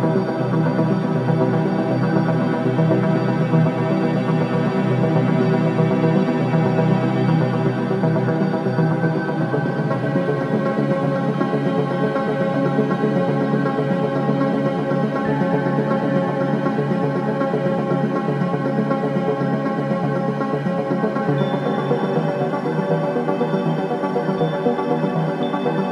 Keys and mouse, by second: 0.0-0.7 typing, 1.7 click, 4.7 ctrl+alt+click, 5.7 click, 6.6-7.2 alt+drag, 7.6 click, 8.7-9.5 alt+drag, 10.2 alt+click, 10.8-11.2 alt+shift+drag, 11.5-13.0 alt+drag, 13.2 click, 13.7 Delete, 15.9-16.9 ctrl+alt+drag, 17.0-20.1 ctrl+alt+drag, 20.6 0, 22.6-24.1 alt+drag.